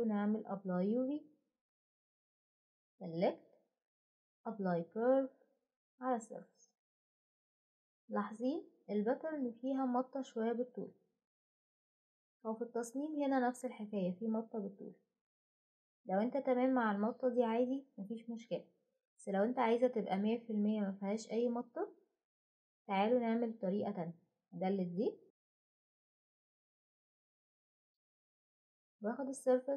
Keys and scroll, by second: 24.3 Delete, 29.2-29.7 typing.